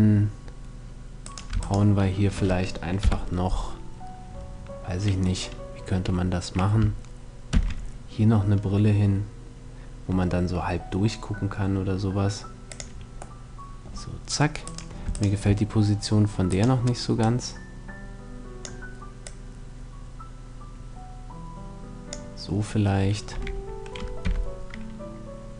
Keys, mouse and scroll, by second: 0.9 right click, 2.7 KP_7, 7.2 shift+d, 12.4-14.4 drag, 13.0-14.0 middle drag, 14.4-16.9 right drag, 16.8 click, 17.9 click, 18.9-20.6 drag, 23.0 r.